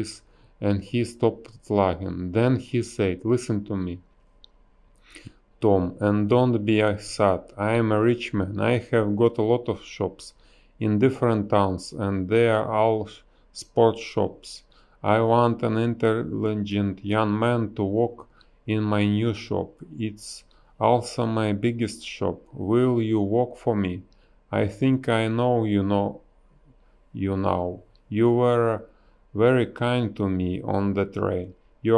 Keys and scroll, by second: 0.1 space, 0.6 a, 3.7 space, 6.9 space, 10.8 space, 12.4 space, 13.1 space, 18.2 space, 18.8 space, 19.4 b, 21.4 ctrl+z, 22.8 space, 27.5 ctrl+z, 29.0 ctrl+z, 30.1 ctrl+z, 31.4 ctrl+z.